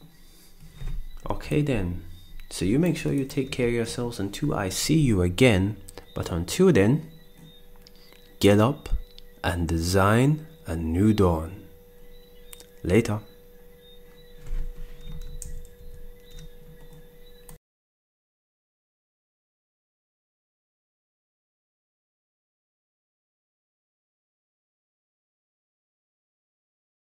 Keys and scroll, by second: 3.6 ctrl+s, 15.4 ctrl+Down.